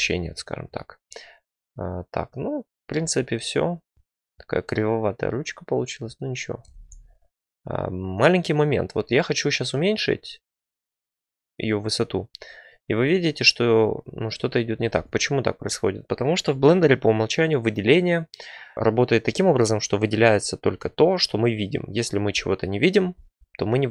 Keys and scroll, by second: 3.0 `, 3.9 Tab, 6.7 ctrl+z, 14.9 ctrl+z.